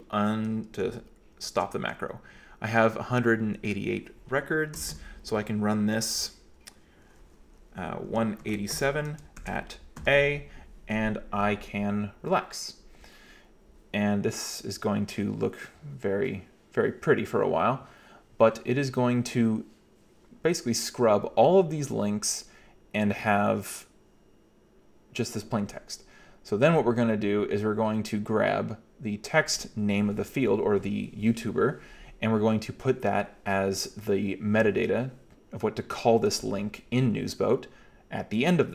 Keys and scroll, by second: 1.2-2.0 typing, 4.8 typing, 6.2 typing, 8.1-10.0 typing.